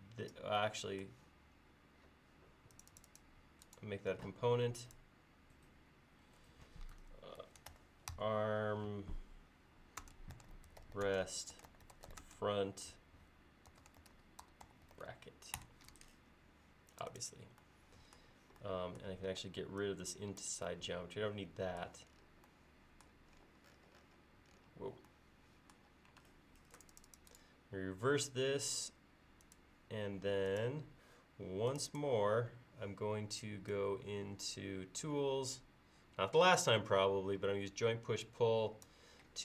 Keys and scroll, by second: 7.2-8.6 typing, 10.0-15.4 typing, 15.6 Return, 19.3 e, 26.2 space, 32.4 ctrl+s.